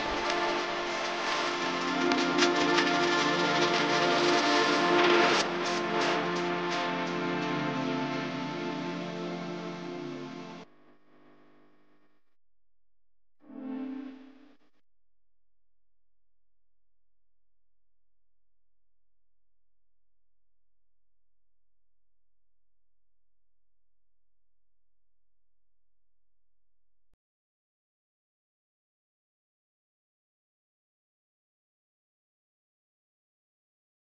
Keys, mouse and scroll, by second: 16.6 ctrl+0.